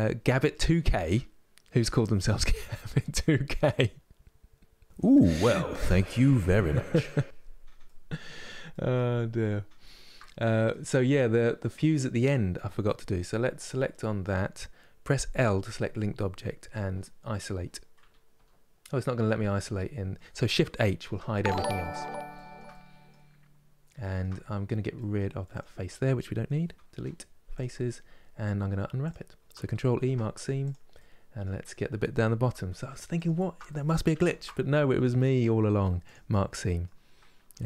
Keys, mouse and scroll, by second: 7.5-8.9 middle drag, 8.9-9.5 scroll up 5, 9.5-13.3 shift+middle drag, 13.3 click, 15.3 l, 16.6 KP_Divide, 17.7 KP_Divide, 18.0 KP_Divide, 18.9-20.7 middle drag, 20.7 shift+h, 21.2-23.0 middle drag, 23.0-23.7 scroll up 3, 23.7 shift+middle click, 24.1-24.7 scroll up 1, 24.7 middle click, 25.3 click, 27.3 Delete, 27.5-28.8 middle drag, 28.8 click, 30.4 ctrl+e, 30.6-32.1 middle drag, 32.1 2, 32.9 alt+click, 33.4-35.8 middle drag, 35.8 ctrl+e, 36.2-37.2 middle drag, 37.2 a.